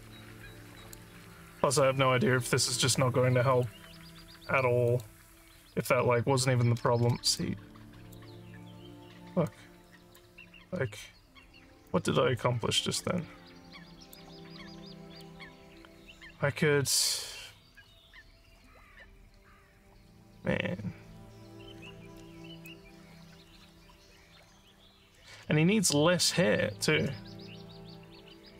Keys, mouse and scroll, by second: 1.3 alt+middle click, 3.5 click, 4.9 click, 7.4 alt+click, 8.6 alt+middle click, 9.2 alt+middle click, 9.5 alt+click, 11.9-14.2 alt+drag, 14.6 scroll down 3, 15.2-22.7 alt+drag, 23.9 scroll up 3, 24.7 alt+middle click.